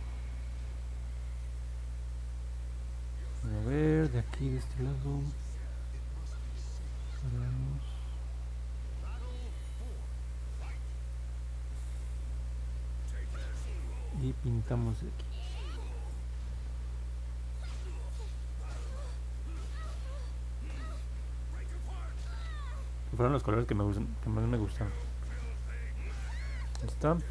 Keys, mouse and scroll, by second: 0.0 click, 0.4 click, 0.7 click, 0.9 click, 5.5 click, 6.6 click, 12.8 1, 15.1-23.6 drag.